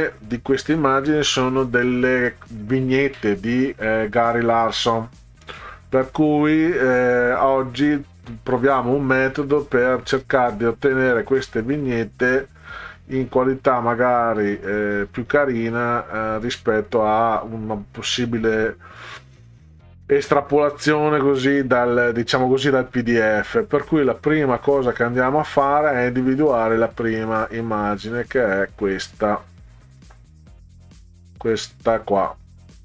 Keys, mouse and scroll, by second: 0.1-0.8 scroll down 4, 5.7-7.7 scroll down 12, 8.6 click, 9.5-10.1 scroll down 4, 10.9 click, 12.1-12.7 scroll down 4, 13.3 click, 13.8 scroll down 2, 14.5 scroll down 2, 15.1-16.1 scroll down 6, 16.8 scroll down 2, 17.9-18.5 scroll down 4, 19.4 scroll down 2, 20.7-21.3 scroll down 4, 22.4 scroll down 2, 22.9 scroll down 2, 24.2-30.0 drag, 30.8 scroll up 2, 31.8 scroll down 2.